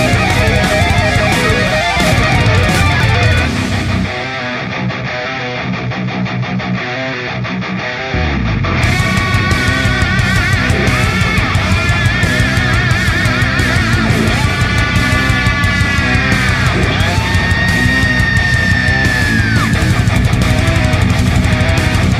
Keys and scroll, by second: 3.0 shift+F5, 3.5 Return, 10.1 i, 15.2 alt+i, 16.1 g.